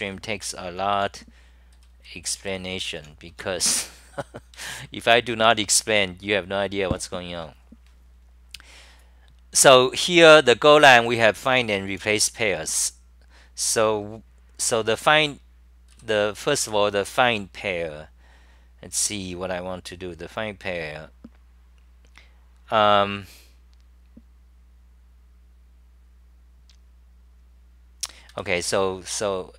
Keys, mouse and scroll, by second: 0.0-3.0 typing, 4.3-5.4 typing, 9.5-12.7 typing, 15.9 m, 16.6 g, 28.3 ctrl+g, 29.2-29.5 typing.